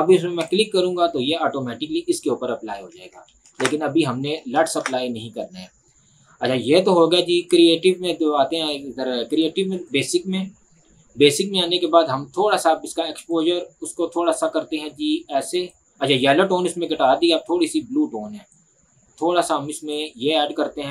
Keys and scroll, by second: 3.6 ctrl+z, 5.3 z.